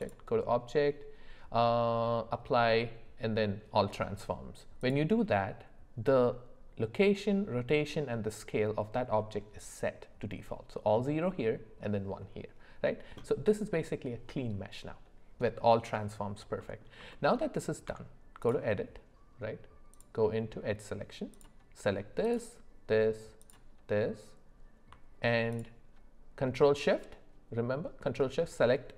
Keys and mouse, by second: 0.0-4.9 drag, 15.6 middle click, 16.6 middle click, 17.1 shift+middle click, 17.9 Tab, 19.9 click, 25.5 alt+shift+click.